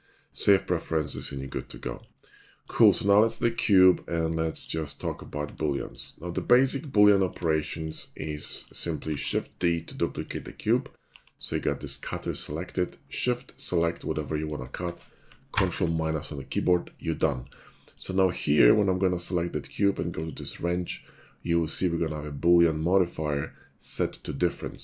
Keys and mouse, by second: 1.6-2.1 shift+drag, 2.7-3.1 shift+drag, 3.3 shift+click, 3.4 shift+a, 5.6-6.0 shift+middle drag, 7.1 shift+drag, 8.2 shift+middle drag, 9.0 shift+d, 10.4 click, 11.1 g, 14.2 click, 14.3-15.2 middle drag, 15.4 ctrl+KP_Subtract, 16.9 middle drag, 17.9 click, 21.5 click.